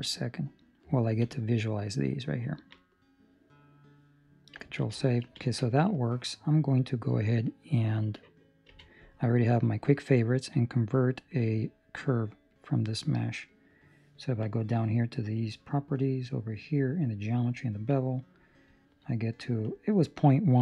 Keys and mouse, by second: 0.6 right click, 1.0 ctrl+middle click, 1.2 middle click, 2.4 ctrl+middle click, 2.7 middle click, 4.8 ctrl+s, 8.6 q, 14.4 click, 15.8 middle click, 17.8 click.